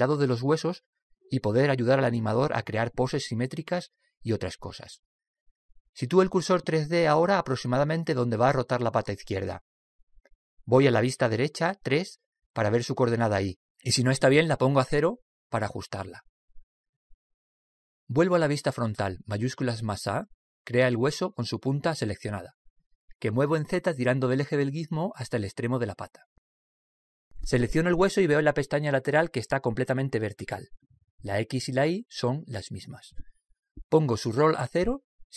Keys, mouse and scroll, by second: 10.9 click, 12.4 KP_3, 14.2 click, 19.2 KP_1, 20.5 shift+a, 24.2 click, 29.3-34.3 right drag.